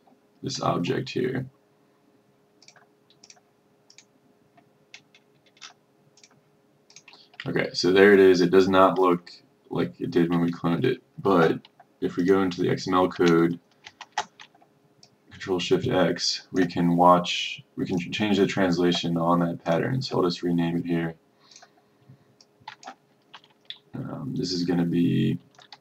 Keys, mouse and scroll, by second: 5.1-5.5 scroll up 1, 6.3 click, 7.6-8.1 ctrl+scroll, 8.9-9.5 ctrl+scroll, 10.6-10.9 ctrl+scroll, 12.3-13.3 drag, 13.9 ctrl+shift+x, 15.1-17.4 drag.